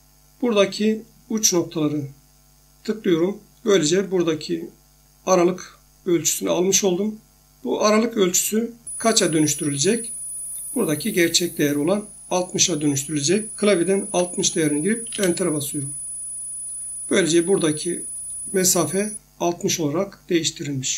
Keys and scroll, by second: 14.0-14.4 typing, 15.1 Return.